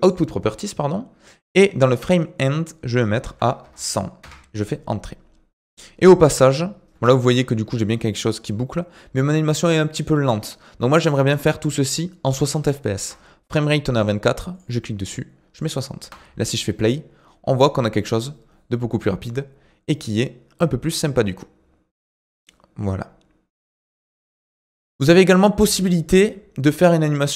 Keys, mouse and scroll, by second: 0.0 click, 2.4-3.6 drag, 3.6 KP_0, 6.9 space, 13.0 space, 14.5-16.0 drag, 16.0 space, 24.3 space, 27.0 click.